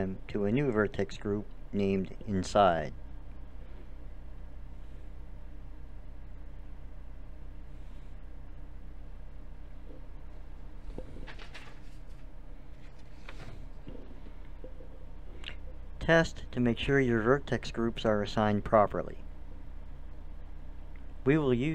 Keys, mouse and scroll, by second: 0.8 ctrl+KP_Add, 4.0-8.9 drag, 13.1-14.7 drag, 14.7 a, 14.9 middle click, 16.2-18.1 drag, 18.1 a, 19.6 click, 20.5 a.